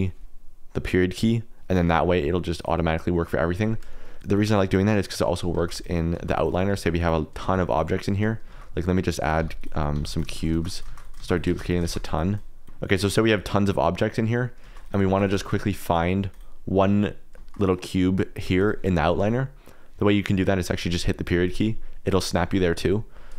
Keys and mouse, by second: 4.1 click, 5.7-12.7 typing, 12.3 click, 14.6 shift+d, 15.0 shift+d, 15.4 shift+d, 16.3 click, 17.5 KP_Decimal, 18.5 g, 21.4 KP_Decimal.